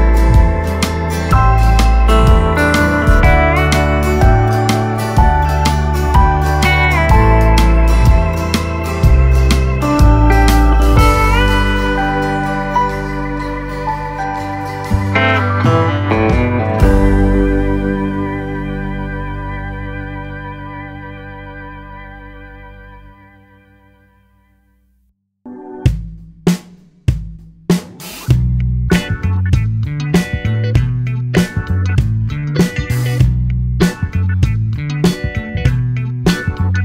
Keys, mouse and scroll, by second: 0.2 shift+d, 1.9-2.9 middle drag, 2.9 shift+d, 4.7 shift+click, 5.2 shift+click, 5.7 shift+click, 6.2 shift+click, 6.6 shift+click, 7.7-9.3 middle drag, 9.3 KP_7, 10.5 shift+d, 12.1 shift+d, 18.1-20.6 middle drag, 20.6 shift+d, 22.1 shift+d, 23.3 middle click, 24.1 KP_1, 24.8-26.2 middle drag, 26.2 click, 26.5-27.1 scroll down 2, 27.1 click, 28.2 s, 29.7-30.9 middle drag, 30.9 click, 31.3 middle click, 32.3 click, 32.7-33.8 middle drag, 33.8 click, 34.2 shift+middle click, 34.8 click.